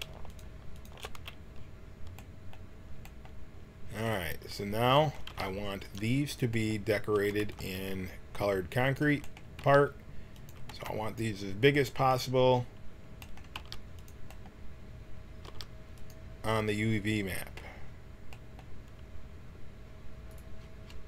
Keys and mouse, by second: 5.2 g, 7.1 a, 7.4 b, 9.6 g, 10.7 b, 13.5 g, 15.4 g.